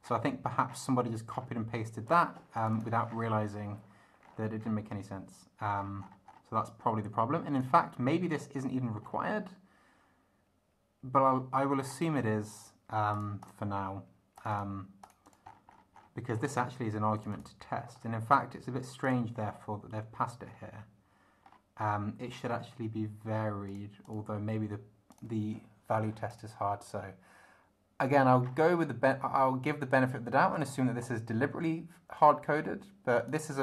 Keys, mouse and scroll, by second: 0.0-0.4 scroll down 1, 0.7 scroll down 1, 1.3 scroll down 2, 2.1 click, 2.5 click, 3.1 scroll down 1, 4.2-4.9 scroll down 2, 5.7-6.5 scroll up 1, 7.5 click, 8.3 scroll up 1, 9.0 scroll up 1, 11.3 scroll down 2, 11.8 scroll down 1, 13.1 click, 14.4 click, 15.0 click, 15.5-16.2 scroll up 1, 16.3-16.7 scroll up 1, 17.2 click, 17.9 scroll up 1, 19.0 click, 20.5 scroll up 2, 21.4 scroll up 2, 23.7 click, 24.0 click, 25.1 click, 26.3 click, 28.4-28.7 scroll down 2, 30.5 click, 32.1-33.5 drag.